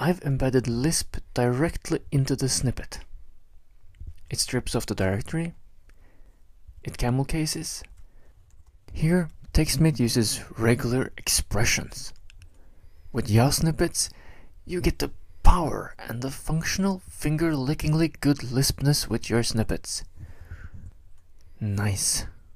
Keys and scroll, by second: 0.4-1.3 typing, 1.6 Tab, 1.9 Tab, 2.0 Tab, 2.1 Tab, 2.2 Tab, 4.6 shift+super+m, 5.0 typing, 6.6 Left, 7.8 shift+super+m, 8.5 (, 9.0 Right, 9.4 Right, 9.6 Left, 9.8 Right, 9.9 Left.